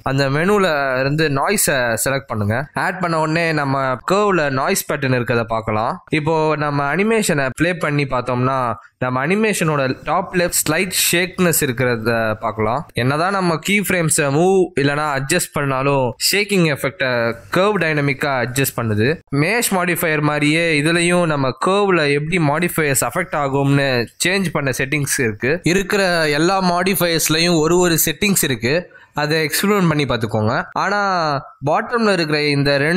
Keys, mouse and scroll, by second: 0.3 ctrl+shift+m, 7.2-8.6 scroll down 2, 8.6 scroll down 2, 8.6 a, 21.7 click, 22.2 shift+d, 24.5 click, 24.8 g, 29.4 click, 29.4 x, 32.5 click.